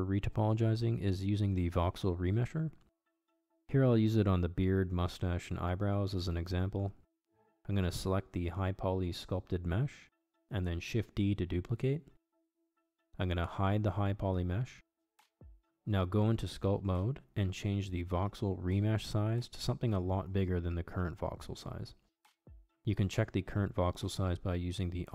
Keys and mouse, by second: 0.2 shift+d, 2.9 click, 3.2-9.0 drag, 5.7 BackSpace, 5.9 BackSpace, 9.9 click, 15.2-17.2 drag, 18.7 click, 20.0 ctrl+Tab, 22.5-25.1 drag.